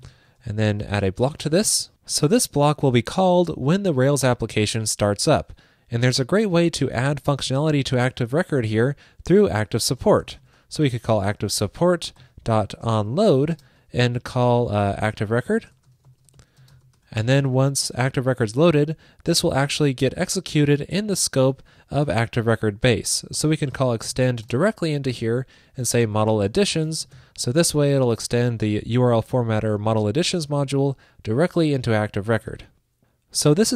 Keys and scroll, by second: 28.6 alt+shift+Left, 32.6 super+s.